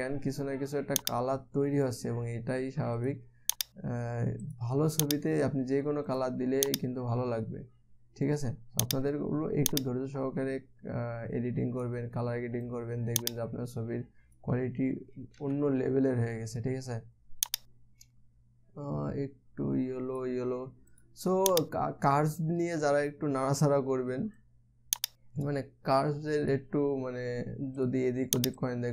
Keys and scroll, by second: 16.0 ctrl+z.